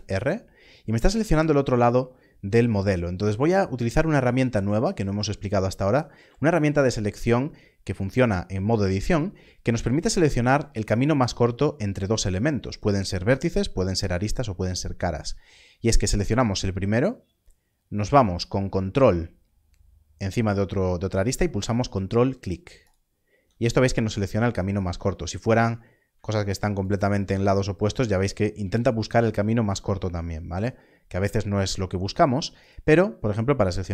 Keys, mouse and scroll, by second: 3.4-4.0 scroll up 1, 4.0 click, 22.8 ctrl+click, 25.4 click, 26.7 ctrl+click, 32.6 ctrl+click.